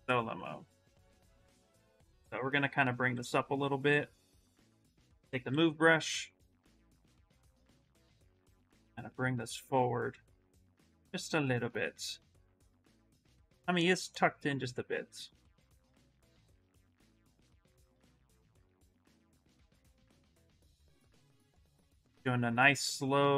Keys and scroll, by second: 1.1 s, 2.5 s, 3.4 s, 4.5-5.8 typing, 17.7-18.6 typing, 20.0 s, 21.7 space.